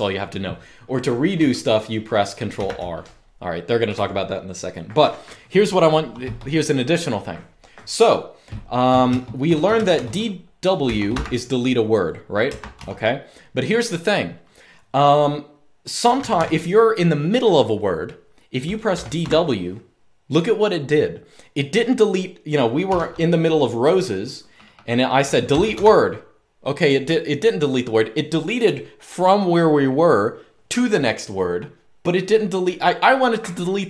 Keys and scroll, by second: 2.2 ctrl+r, 3.6 u, 8.5-11.1 typing, 12.3 Escape, 12.5 u, 15.9 typing, 17.6-18.9 typing, 22.6 u, 25.0-25.9 typing.